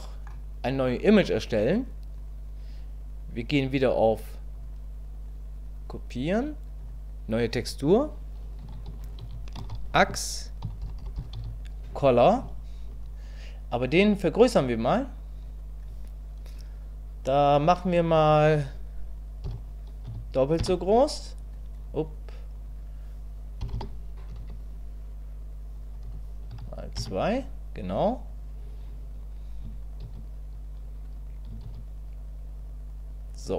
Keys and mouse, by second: 0.0 click, 4.7-33.5 drag, 23.7 BackSpace.